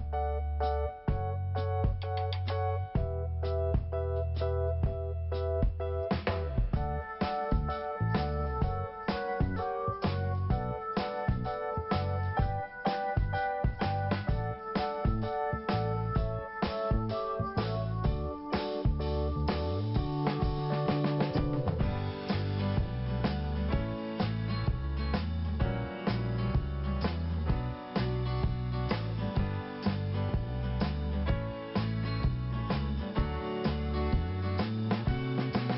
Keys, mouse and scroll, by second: 1.7 click, 1.8 click, 2.4 click, 3.6 scroll down 1, 4.1 scroll up 1, 5.5 click, 7.9 click, 9.1 click, 12.2 click, 15.0 scroll down 1, 15.7 click, 17.4 scroll down 1, 19.4 click, 19.5 click, 20.2 click, 20.4 click, 21.4 click, 24.6 click, 25.9 scroll down 1, 26.6-27.0 scroll up 2, 27.4 click, 30.2 click, 30.2 click, 31.0 scroll up 1, 31.8 click, 32.6 click, 32.7 click, 33.9 click, 35.1 scroll down 1.